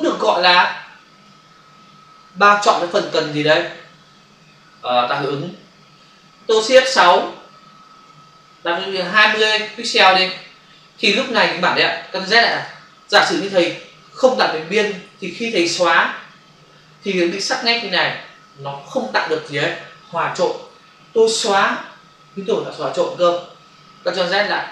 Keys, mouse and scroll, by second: 7.8 shift+F6, 9.2 typing, 9.8 Return, 12.5 ctrl+alt+z, 16.4 Delete, 17.8 ctrl+d, 24.2 ctrl+alt+z.